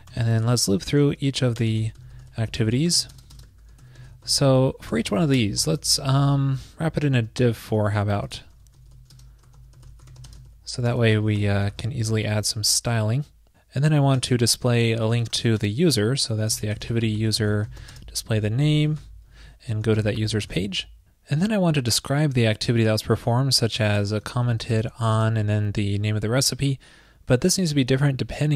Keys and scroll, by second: 0.3 ctrl+shift+>, 4.9 super+Return, 5.0 super+Return, 5.6 ctrl+shift+>, 5.7 ctrl+shift+>, 10.9 super+Return, 10.9 super+Return, 11.4 ctrl+shift+>, 14.2 ctrl+shift+>, 20.4 super+Return, 27.6 alt+shift+Left, 27.6 alt+shift+Left, 27.9 alt+shift+Left.